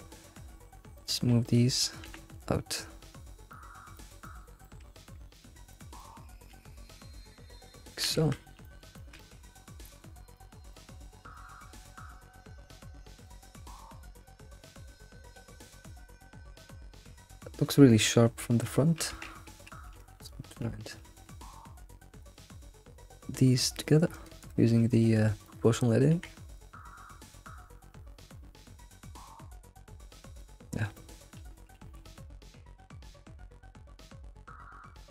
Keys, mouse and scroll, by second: 0.4 Tab, 1.0 click, 1.4 ctrl+click, 2.0 g, 3.9 alt+middle click, 4.2 middle click, 4.9-5.3 scroll up 2, 5.3 click, 5.7 ctrl+click, 6.0-6.5 middle drag, 6.5 alt+s, 7.6 scroll down 4, 8.7-9.6 middle drag, 9.6-10.4 scroll up 1, 10.4 click, 10.8-11.1 middle drag, 11.1 alt+shift+z, 11.4-13.3 middle drag, 14.0 alt+middle drag, 14.3 alt+middle click, 14.7 alt+middle click, 15.0-15.4 shift+middle drag, 15.4 alt+shift+z, 15.7-16.1 scroll up 3, 16.1 middle click, 17.1-17.8 middle drag, 18.0 scroll, 18.0 scroll up 3, 19.1 Tab, 19.2 Tab, 19.9 Tab, 20.0 Tab, 20.2 shift+click, 20.7 Tab, 20.7-21.0 scroll down 2, 21.0 alt+x, 22.8-23.5 scroll, 23.7 g, 24.4-25.4 right drag, 25.4 click, 26.1 g, 30.9 middle click, 31.7 alt+x, 33.1 middle click, 34.5 middle click.